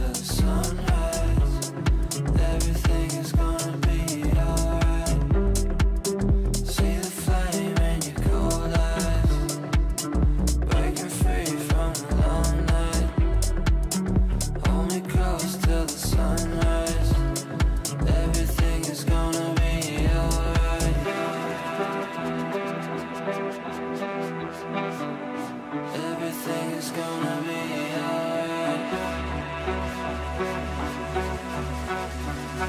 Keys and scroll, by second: 5.0 ctrl+z.